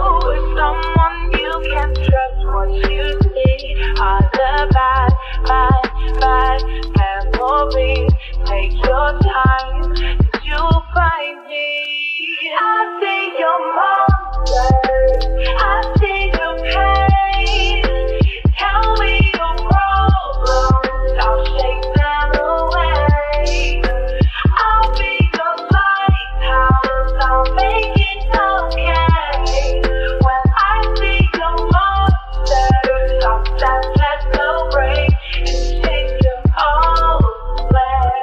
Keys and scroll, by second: 27.4 p, 33.0 s, 36.4 p.